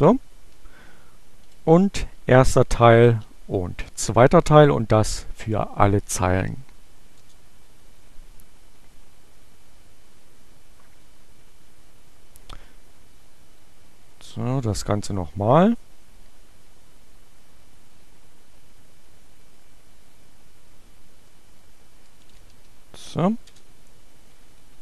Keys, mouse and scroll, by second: 1.7 alt+1, 1.8 space, 3.0 alt+2, 6.4 Return, 8.0 Up, 9.0 Left, 11.5 Left, 14.0 Delete, 14.8 Delete, 16.7 Right, 19.5 Left, 21.7 shift+7, 22.4 shift+g, 23.4 Return, 24.3 Up.